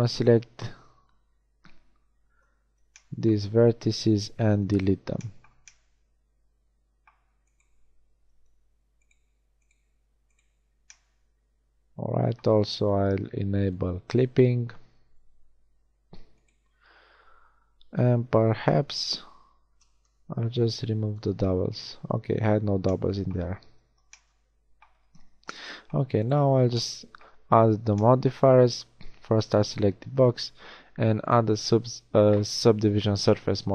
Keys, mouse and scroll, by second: 4.1 x, 8.5 g, 9.9 g, 13.6-15.7 drag, 15.7 g, 18.1 a, 18.3 a, 19.7 ctrl+v, 23.5 a, 23.8 Tab, 25.2 z.